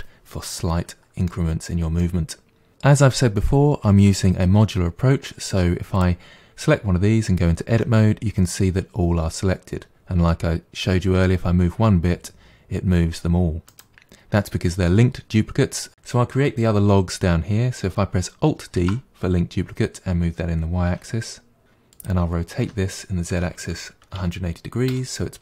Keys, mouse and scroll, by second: 0.5-1.6 middle drag, 1.6-2.0 scroll down 1, 2.0 middle click, 6.0 drag, 7.8 Tab, 10.9 g, 15.9 click, 18.8 alt+d, 22.7 r.